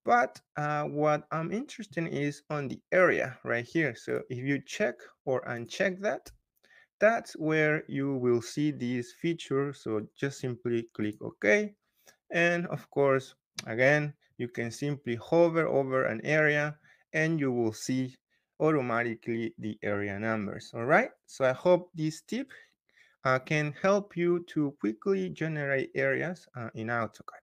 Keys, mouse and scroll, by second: 4.1 click, 11.0 click, 13.7 scroll up 2, 13.9 scroll, 14.5 scroll, 26.9-27.4 scroll.